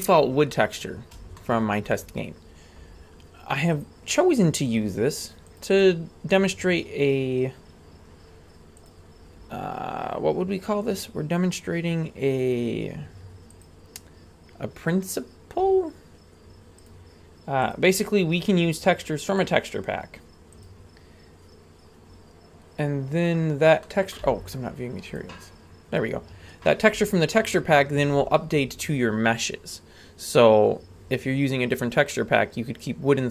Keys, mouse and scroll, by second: 0.4-1.1 scroll up 2, 1.3 shift+middle click, 3.8 click, 4.7 click, 5.7-7.8 drag, 8.8-13.7 drag, 16.8-21.9 drag, 23.8 middle click, 24.2 z, 26.1-29.4 scroll up 1.